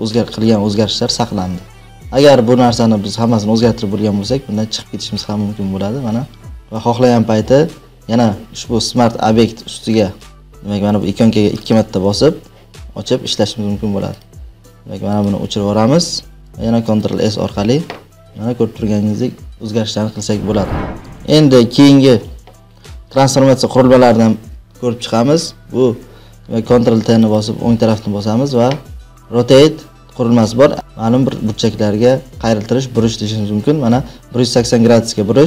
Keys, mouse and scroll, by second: 2.2 click, 2.7 click, 6.5 click, 9.4 click, 11.6 click, 11.7 click, 14.1 click, 15.2 click, 16.2 Delete, 16.8 ctrl+s, 18.1 click, 21.2 click, 25.4 ctrl+t, 27.3 right click, 28.2 right click.